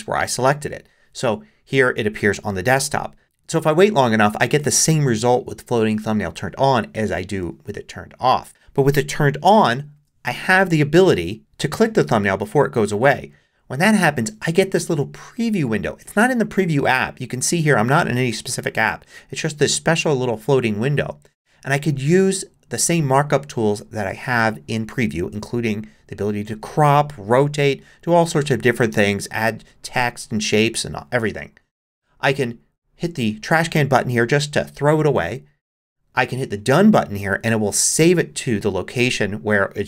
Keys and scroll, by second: 9.9 shift+super+5.